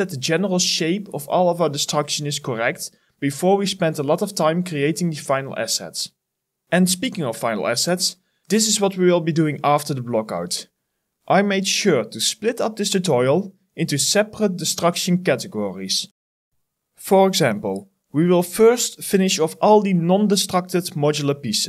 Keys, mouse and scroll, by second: 0.2 ctrl+v, 1.3 ctrl+v, 1.6 ctrl+click, 1.8 right click, 2.0 ctrl+v, 2.9-4.8 typing, 4.1 ctrl+click, 4.3 ctrl+c, 4.4 ctrl+v, 4.6 right click, 5.9-6.8 typing, 8.2 ctrl+right click, 10.5 [, 11.9 alt+click, 12.5 alt+click, 13.5 ctrl+right click, 13.7 alt+click, 14.9 alt+click, 15.2 alt+click, 18.0 double click, 20.8 alt+middle click, 21.0 alt+right click, 21.1 alt+click.